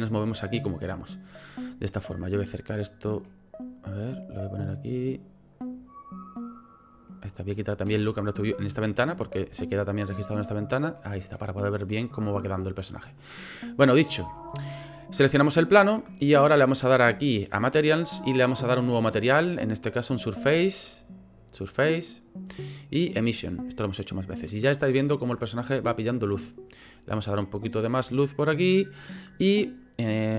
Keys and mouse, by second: 5.5-7.9 drag, 7.9 n, 8.7 click, 9.0 n, 9.6-11.1 ctrl+drag, 12.5 click, 14.4 shift+drag, 15.4 click, 17.1 click, 18.4 click, 20.4-21.5 drag, 22.1-23.4 drag, 27.1-28.7 drag.